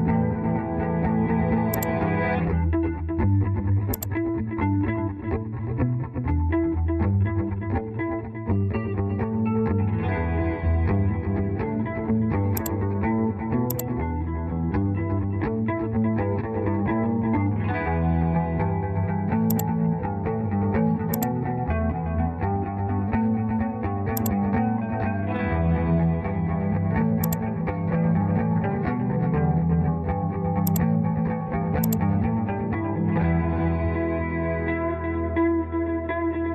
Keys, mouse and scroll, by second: 4.9 Escape, 16.1 Return.